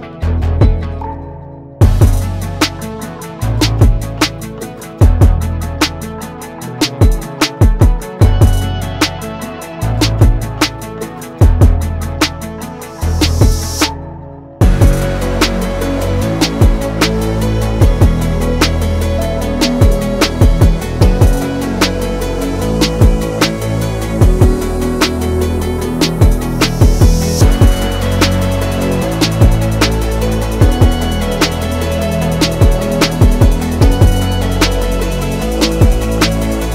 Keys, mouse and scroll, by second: 0.1-2.0 drag, 3.5-10.3 drag, 11.5-14.1 alt+drag, 15.3 alt+click, 17.4 alt+click, 23.1 right click, 25.6 click, 32.1 click.